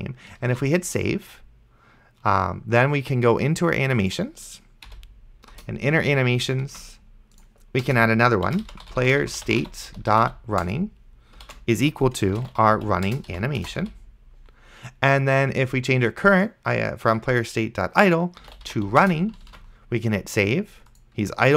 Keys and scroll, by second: 0.8 ctrl+s, 5.2 ,, 5.5 Return, 7.9 Return, 8.4-13.9 typing, 18.3-19.3 typing, 19.8 ctrl+s.